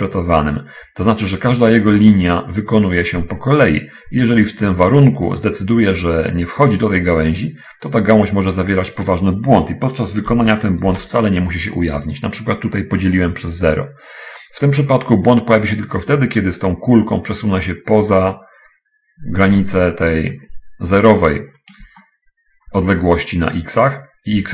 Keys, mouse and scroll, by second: 2.4 click, 3.4 click, 4.8 click, 7.0-8.9 drag, 9.2 click, 10.5 /, 11.2 0, 22.1-23.4 shift+middle drag.